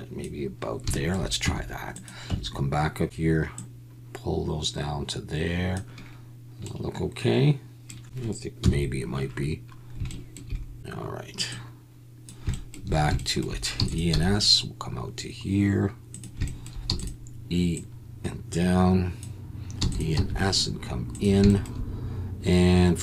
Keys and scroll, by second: 1.4 Tab, 2.3 Tab, 8.6 KP_1, 13.7 e, 14.1 s, 16.9 e, 19.8 e, 20.1 s.